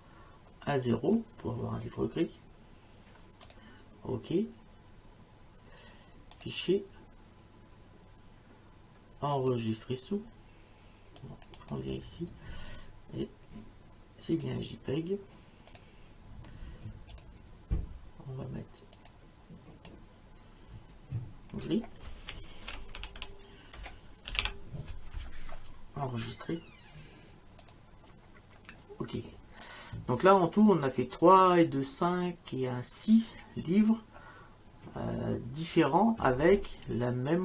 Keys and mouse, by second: 3.5 click, 6.4 click, 9.4 click, 11.2 click, 14.4 click, 15.7 click, 17.1 click, 19.0 click, 22.4-24.9 typing, 27.6 click, 29.6 click.